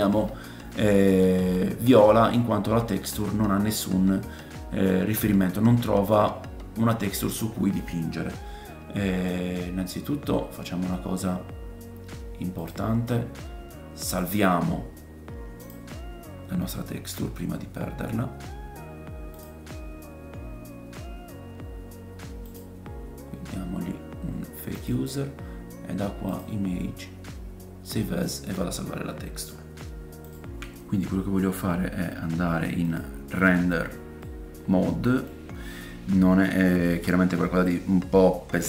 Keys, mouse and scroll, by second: 13.0-14.2 drag, 14.3-15.6 drag, 15.7-33.0 drag, 22.4 middle click, 22.4 right click, 26.3-30.3 middle drag, 26.3-30.3 right drag, 32.9-38.6 middle drag, 37.9-38.6 scroll up 2.